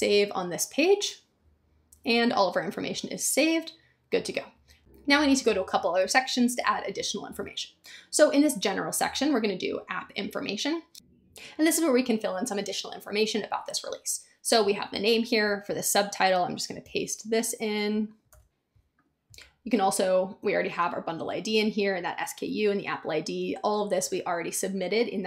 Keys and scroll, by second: 16.8 super+c, 18.3 super+v.